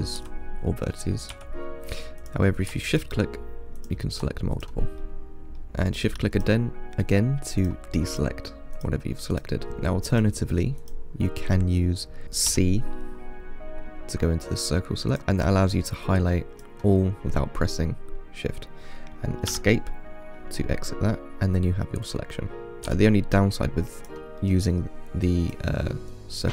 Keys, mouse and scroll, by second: 0.4 1, 1.6 3, 2.4 click, 3.1 shift+click, 4.0 shift+click, 4.8 click, 5.2 middle click, 5.7 shift+click, 6.1 shift+click, 6.6 shift+click, 7.3 shift+click, 7.8 shift+click, 8.3 shift+click, 9.0 shift+click, 9.6 shift+click, 9.7 middle click, 10.4 click, 11.1 click, 12.7 c, 20.9-22.7 middle drag, 23.1 c.